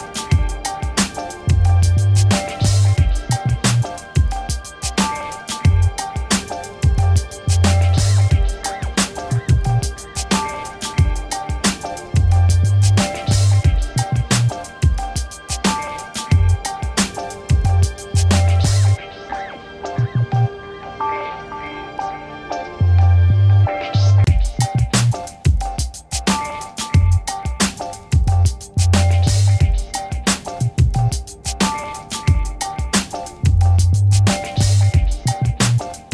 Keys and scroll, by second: 0.0-3.0 typing, 8.1 p.